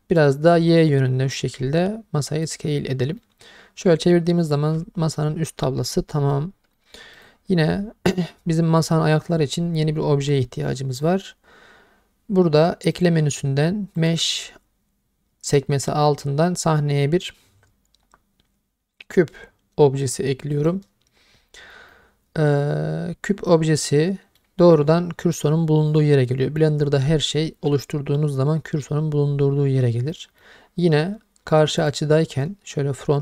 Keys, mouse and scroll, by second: 0.2 click, 3.2-6.3 middle drag, 6.8 middle click, 7.1 click, 12.9-20.7 drag, 21.9-24.4 middle drag, 26.2-26.6 middle drag, 30.1-30.4 middle drag, 31.8 click.